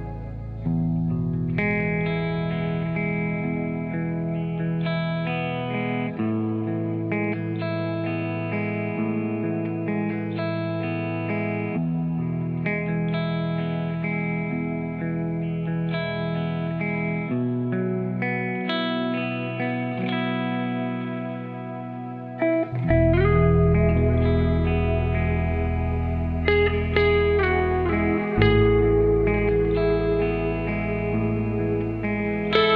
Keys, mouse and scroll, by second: 0.9 click, 1.3 g, 2.2 s, 4.1 click, 4.6 g, 5.8 s, 7.8 click, 8.2 g, 10.7 click, 11.1 g, 12.5 click, 12.8 g, 14.1 click, 14.6 g, 16.6 click, 17.0 s, 17.9 g, 19.3 s, 20.4 click, 22.9 ctrl+r, 26.1-32.7 drag.